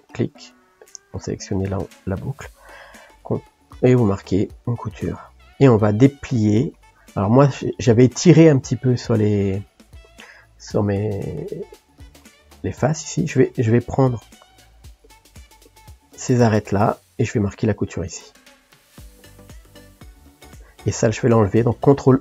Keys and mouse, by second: 0.0-3.0 ctrl+drag, 3.1 ctrl+e, 5.3-13.8 middle drag, 13.8 click, 14.5 shift+click, 15.0 shift+click, 15.7 shift+click, 16.0-17.4 middle drag, 17.4 ctrl+e, 20.6 click, 22.1 ctrl+e.